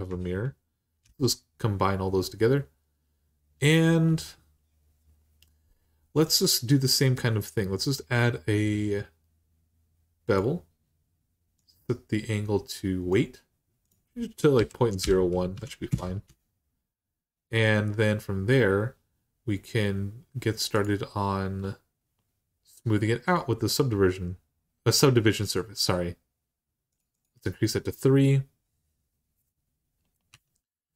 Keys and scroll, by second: 0.8 ctrl+j, 14.3-15.3 typing, 15.7 Return, 30.1 Tab.